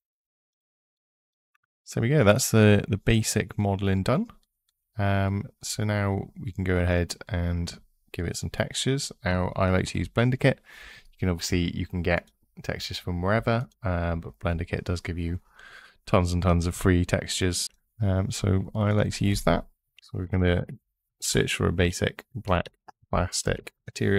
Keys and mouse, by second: 0.0 middle click, 3.9 click, 9.7 n, 12.0 click, 13.4 click, 17.6-23.5 drag.